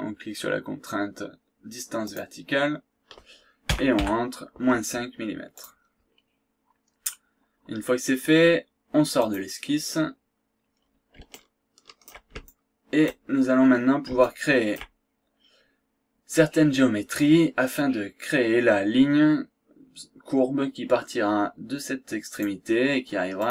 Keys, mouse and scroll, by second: 2.0 click, 3.6 KP_Subtract, 4.2 KP_5, 5.5 click, 6.0 scroll down 1, 6.3-6.7 scroll up 2, 7.0 scroll down 2, 9.2 click, 10.0-10.4 scroll down 2, 10.4-11.0 scroll up 1, 11.3 shift+right click, 12.4 shift+right click, 13.4 shift+scroll down 2, 13.7-14.1 scroll up 2, 14.2 shift+right click, 22.4 click, 23.4 click.